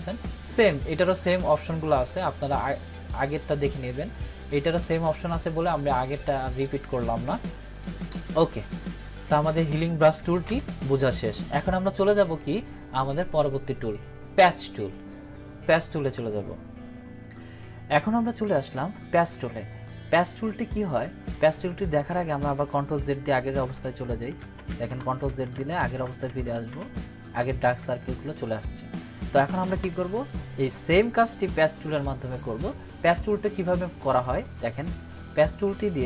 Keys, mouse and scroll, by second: 10.1 click, 12.5-13.5 drag, 23.4 ctrl+z, 29.8 ctrl+=.